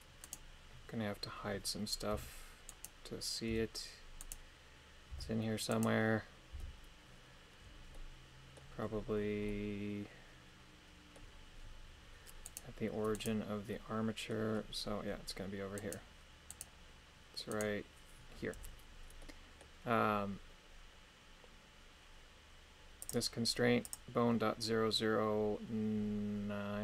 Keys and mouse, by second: 0.4 right click, 2.4 h, 2.9 right click, 3.4 h, 5.2 h, 5.9 right click, 6.5 h, 7.9 middle click, 9.6-11.3 middle drag, 12.4 right click, 13.2 right click, 13.7 middle click, 15.9 right click, 19.2 middle click, 23.0 click, 24.0-26.8 drag.